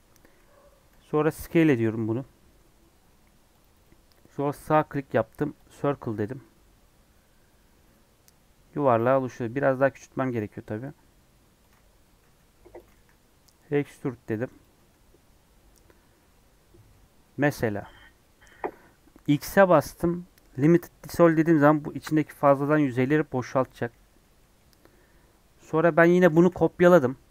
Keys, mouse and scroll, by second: 0.9 s, 5.6 right click, 6.3-9.4 middle drag, 9.4 s, 12.1 s, 12.9 e, 14.8 Tab, 15.1 scroll down 1, 15.4 scroll up 2, 15.5 Tab, 16.1-17.7 middle drag, 17.7-18.2 scroll up 2, 18.2-21.1 middle drag, 21.1 x, 22.0 scroll up 2, 22.5 middle click, 23.4 scroll down 1, 23.6-24.9 middle drag, 24.9 scroll down 1, 25.4 scroll up 4, 25.9 scroll down 3, 26.2 shift+d.